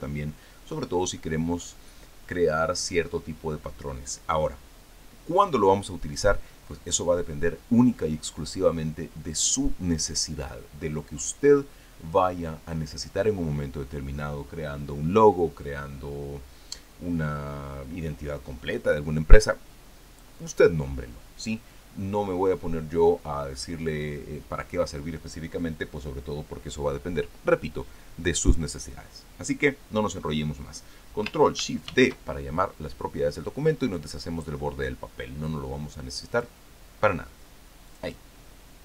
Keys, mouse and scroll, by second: 32.7 ctrl+shift+d, 37.2 click, 38.7 click.